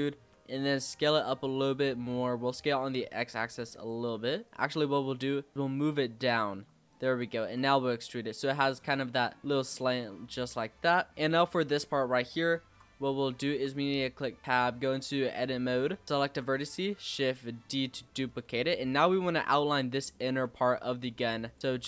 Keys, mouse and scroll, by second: 0.1 s, 1.3-2.6 middle drag, 2.6 s, 3.9 s, 4.5 ctrl+z, 4.5 click, 5.5 g, 6.5 s, 7.2 e, 8.8 Tab, 8.9 scroll down 2, 9.0-11.2 middle drag, 11.2 z, 11.7-12.3 scroll up 4, 12.3-13.5 shift+middle drag, 13.5 Tab, 14.4 click, 16.0 scroll up 2, 16.2 shift+d, 18.5 e, 20.2 e, 21.4 click, 21.6 ctrl+b.